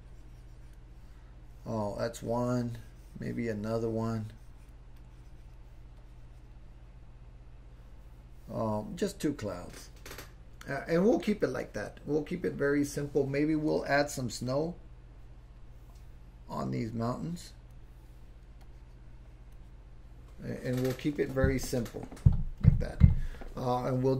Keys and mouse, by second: 0.0 click, 2.2-3.5 drag, 3.7 click, 5.0 click, 6.0 click, 14.5-15.6 drag, 16.7-17.7 drag, 18.6 click.